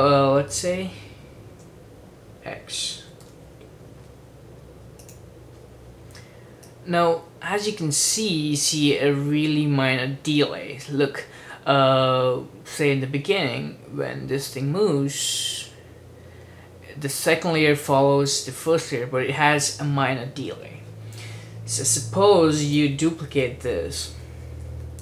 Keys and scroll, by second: 1.6 Return, 2.8-3.8 typing, 23.7 super+d, 24.0 super+d, 24.2 super+d, 24.4 super+d, 24.6 super+d, 24.8 super+d.